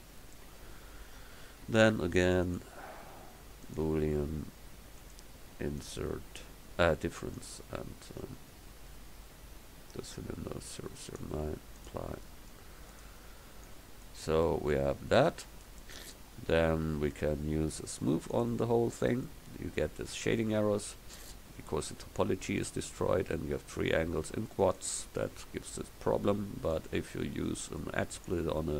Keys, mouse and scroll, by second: 1.1 KP_1, 13.0-14.5 middle drag, 15.1-16.3 drag, 17.6 click.